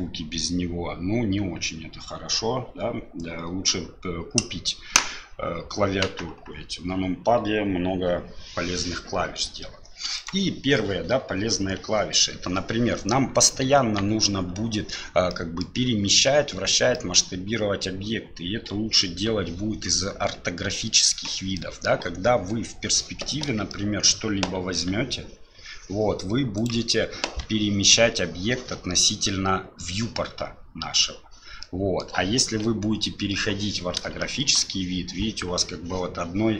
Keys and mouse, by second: 10.2 right click, 13.8 KP_1, 14.5 KP_7, 15.3 middle click, 16.9 middle click, 21.6 middle click, 23.7 shift+middle click, 24.7 g, 31.6 middle click, 32.8 KP_7, 34.2 shift+click.